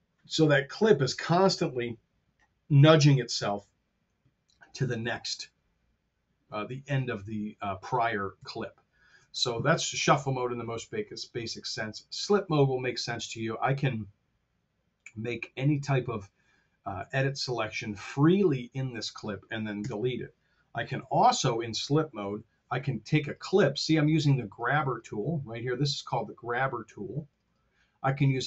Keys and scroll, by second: 4.9 super+z, 8.3 super+z, 19.7 BackSpace, 20.9 super+z, 22.3 F8.